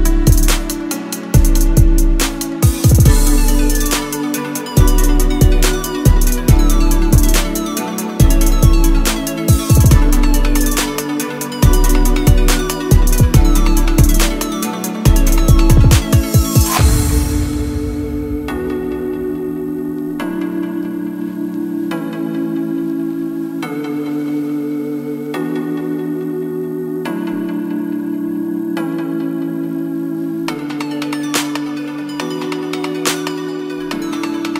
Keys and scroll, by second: 34.0 KP_8, 34.1 KP_0, 34.4 Return.